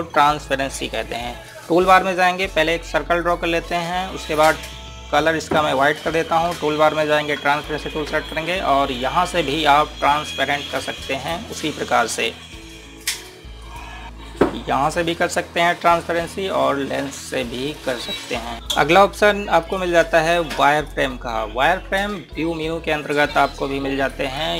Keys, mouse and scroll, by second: 2.0 click, 14.0 click, 18.0 click, 18.5 Caps_Lock.